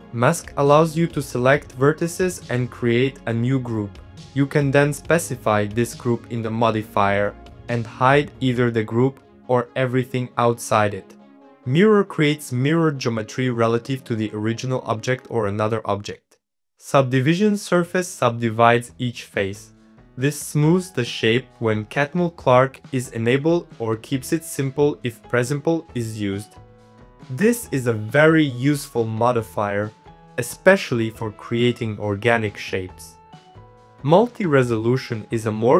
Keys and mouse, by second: 0.2 shift+middle click, 0.3 c, 0.9 middle click, 1.0 c, 1.3 c, 1.7 middle click, 1.9 c, 2.3 middle click, 2.5 shift+middle click, 2.8 middle click, 3.1 click, 3.4-4.4 shift+drag, 4.5 middle click, 5.2 click, 5.5 middle click, 6.0 click, 6.2 middle click, 6.7 click, 7.7 click, 7.9 middle click, 8.9 click, 9.2 click, 9.3 click, 10.6 click, 11.0 1, 11.6 click, 11.8 click, 12.2-14.9 typing, 12.3 click, 14.6 click, 14.7 middle click, 15.3 middle click, 16.0 g, 16.5 middle click, 17.2 middle click, 17.6 middle click, 17.7 middle click, 18.0 middle click, 19.0 click, 20.0 click, 20.3 click, 20.9 click, 21.4 middle click, 22.2 click, 22.6 middle click, 22.7 Tab, 23.2 3, 23.3 click, 24.7 e, 24.9 shift+middle click, 25.3 e, 26.0 g, 26.7 Tab, 26.8 middle click, 27.1 middle click, 28.4 click, 28.5 shift+middle click, 29.0 middle click, 29.6 middle click, 30.2 click, 30.4-31.6 middle drag, 32.2 middle click, 33.4 middle click, 34.0 click, 34.2 click.